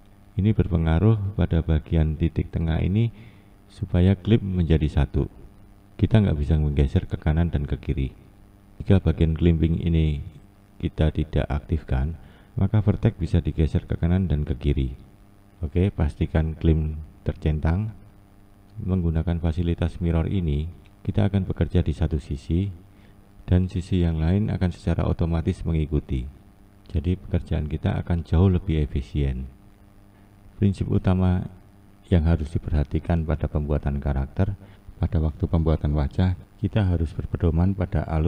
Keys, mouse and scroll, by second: 4.8 click, 6.1 click, 9.2 ctrl+z, 9.9 ctrl+z, 11.5-12.5 drag, 17.2 ctrl+z, 18.9-20.2 drag, 20.9 click, 21.8 click, 25.8 ctrl+z, 36.2-37.1 scroll down 3.